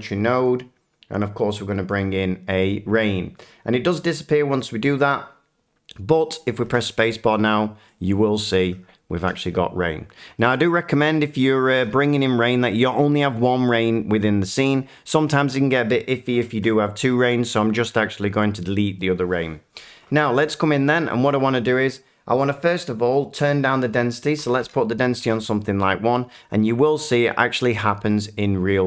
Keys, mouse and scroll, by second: 0.4 click, 1.9 click, 8.5 middle click, 9.2 typing, 9.3-10.0 scroll, 10.6 shift+middle click, 14.7 click, 16.5 Delete, 19.3 middle click, 20.4 shift+middle click, 20.5 click, 21.1 middle click, 23.7 click, 24.4 1, 24.6 Return, 28.4 middle click.